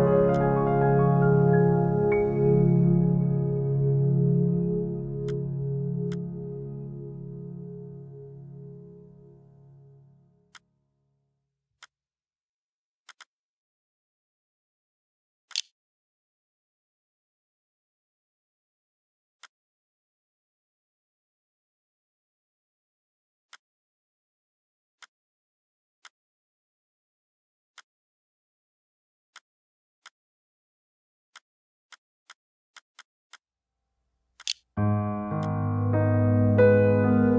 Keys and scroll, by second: 14.2-15.8 typing, 15.5 ctrl+b, 33.4-34.4 typing.